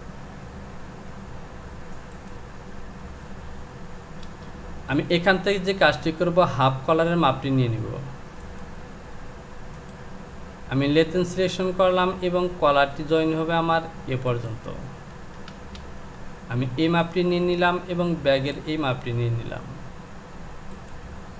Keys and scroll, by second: 4.3 Return, 15.5 space.